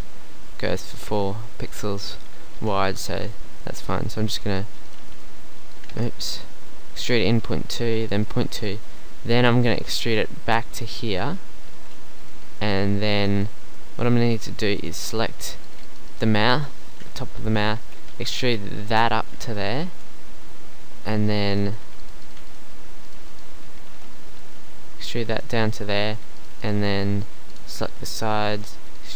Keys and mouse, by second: 2.6 KP_3, 3.1 z, 4.4 e, 5.0 e, 5.9 ctrl+z, 6.2 g, 7.2 e, 10.0 e, 11.7 g, 12.8 middle click, 13.8 z, 16.5 KP_1, 16.6-17.7 right drag, 17.0 z, 18.1 e, 19.9 z, 23.7 KP_1, 24.0 z, 24.4 e, 25.5 z, 27.9 KP_1, 28.2 z, 28.5 e.